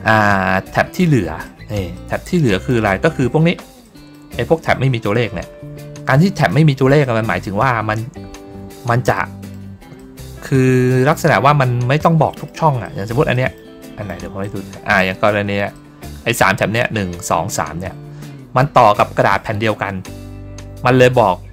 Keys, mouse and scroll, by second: 0.6 middle click, 1.3 middle click, 1.8 middle click, 2.3 middle click, 3.2 ctrl+scroll up 2, 3.7 middle click, 4.4 ctrl+scroll up 1, 5.6 ctrl+scroll down 1, 6.9 middle click, 9.0 middle click, 9.9-11.0 middle drag, 11.9 middle click, 12.7 middle click, 13.2 middle click, 13.7 middle click, 14.3 middle click, 15.1 ctrl+middle click, 15.6 middle click.